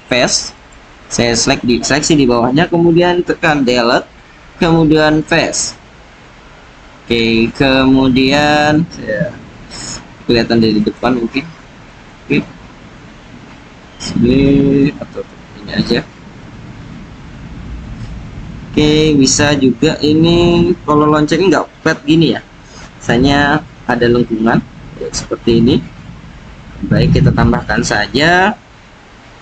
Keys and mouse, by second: 3.4 Delete, 6.2-7.1 drag, 7.4-8.6 drag, 11.8 click, 14.7 KP_1.